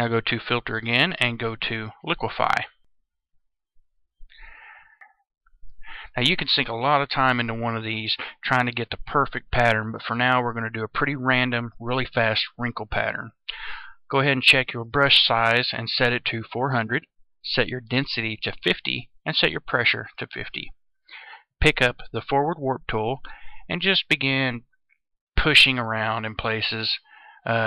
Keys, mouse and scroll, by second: 0.0 click, 2.2-27.6 drag.